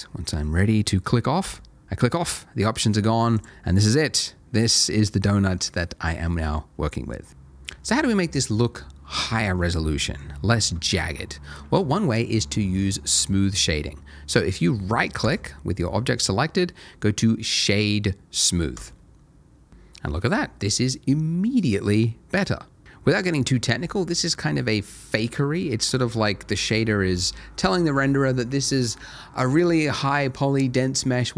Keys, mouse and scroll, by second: 1.4 click, 3.9 middle click, 5.4 shift+middle click, 5.7 shift+middle click, 9.9-10.3 scroll up 1, 10.3 middle click, 10.9 shift+middle click, 15.2 right click, 18.8 click.